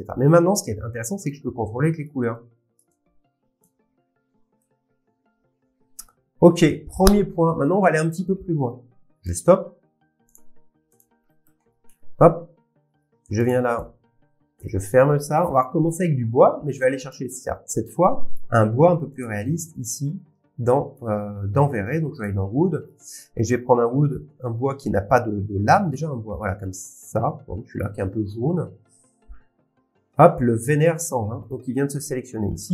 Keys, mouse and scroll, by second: 1.2 click, 6.4 scroll down 1, 9.3 click, 10.3 click, 11.0 click, 11.2 scroll, 11.4 middle click, 11.6 middle click, 12.0 scroll, 13.4 scroll, 13.5 click, 14.0 scroll down 9, 14.6 click, 16.6 scroll, 17.1 Delete, 17.1 click, 18.3 click, 20.9 click, 22.2 click, 22.8 middle click, 27.6-28.0 scroll, 27.8 click, 29.6 click, 31.5 click.